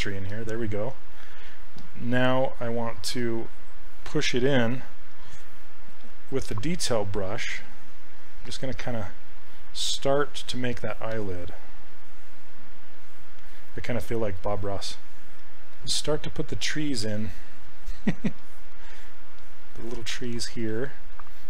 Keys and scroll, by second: 6.0 s, 17.1 ctrl+z.